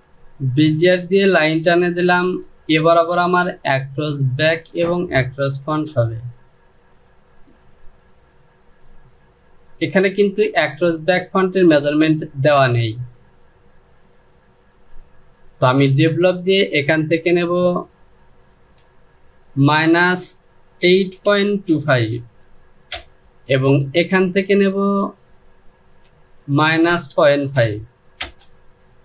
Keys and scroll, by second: 5.5 Delete, 18.7 Down, 19.3 KP_Subtract, 20.5 KP_8, 20.9 KP_Decimal, 21.3 KP_2, 21.6 KP_5, 22.6 Return, 26.2 KP_Subtract, 26.7 KP_Decimal, 27.2 KP_5, 27.9 Return.